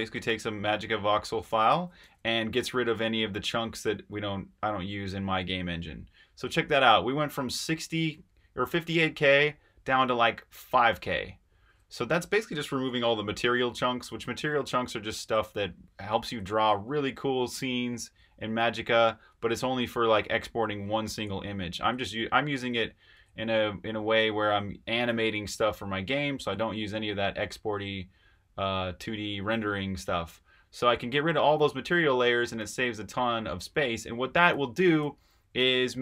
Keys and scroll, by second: 0.0-3.4 typing, 14.3 super+Tab, 23.1 super+Tab, 24.5 Escape, 35.3-36.0 typing.